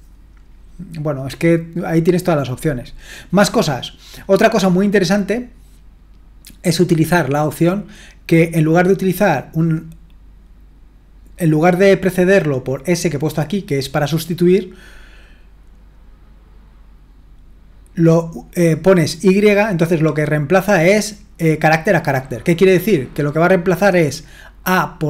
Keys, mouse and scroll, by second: 3.5-5.7 scroll down 1, 5.7-10.2 scroll down 1, 15.4-16.5 scroll down 2, 17.1 scroll down 1.